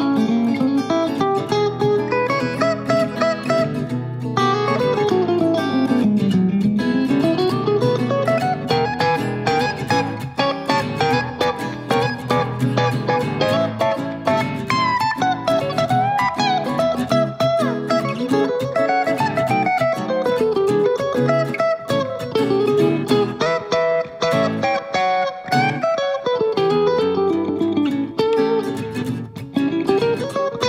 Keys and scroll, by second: 20.0 super+c, 20.2 super+v.